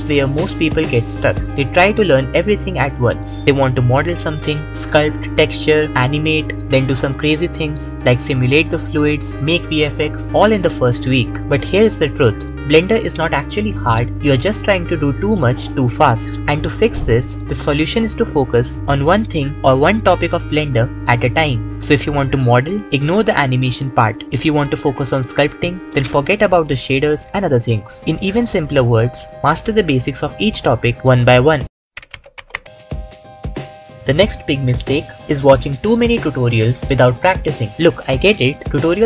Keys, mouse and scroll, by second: 5.0 s, 5.4 v, 5.6 c, 5.8 shift+t, 6.5 alt+click, 7.3 w, 7.6 alt+click, 38.2 7, 38.4 KP_7.